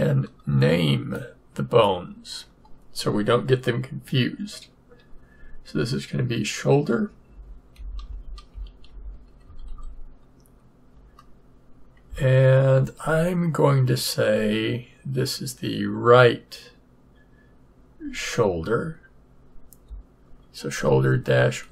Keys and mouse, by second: 0.1 middle click, 1.1-2.8 drag.